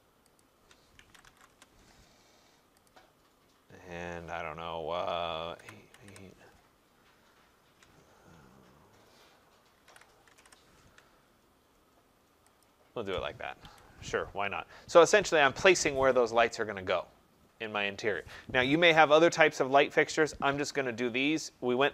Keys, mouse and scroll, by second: 0.4 shift+click, 1.0-1.5 typing, 2.9 click, 5.3-6.7 typing, 9.6-10.8 typing, 12.6 shift+click, 13.7 Escape.